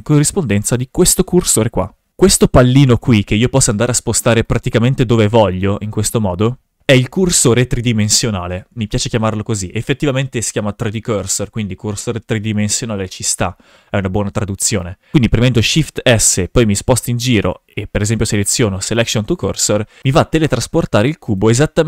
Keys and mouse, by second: 0.5 shift+f, 4.7 click, 5.5 click, 6.8 shift+f, 15.7 shift+s, 20.0 click, 20.7 shift+s.